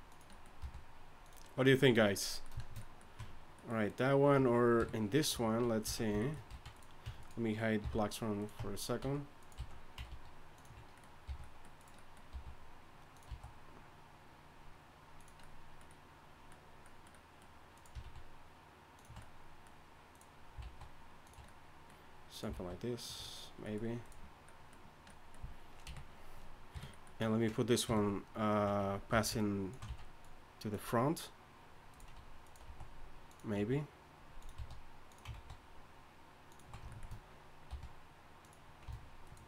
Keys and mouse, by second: 0.6 r, 3.2 Tab, 4.8 KP_3, 5.3 Tab, 5.8 z, 6.5 z, 7.0 Tab, 7.8 h, 8.6 Tab, 9.0 z, 9.5 z, 10.1 alt+s, 11.3 r, 12.3 r, 13.3 s, 18.0 alt+s, 20.6 alt+s, 22.5 alt+s, 25.8 KP_1, 26.7 KP_3, 27.8 KP_3, 29.1 z, 29.9 z, 32.7 s, 33.6 g, 34.6 s, 35.3 alt+s, 37.7 r.